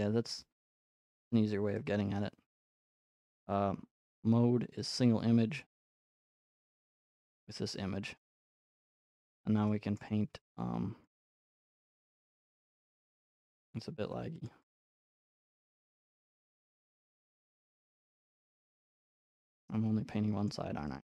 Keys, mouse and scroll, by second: 3.4 middle click, 4.2 click, 4.9 click, 5.7 click, 6.0 click, 6.5 click, 8.5 shift+scroll, 9.2 scroll, 10.0-11.0 scroll, 11.0 click, 13.4-13.9 scroll, 13.9 scroll, 13.9 f, 14.5 click, 15.2 click, 15.4-16.0 scroll, 16.7 click, 20.5 middle click.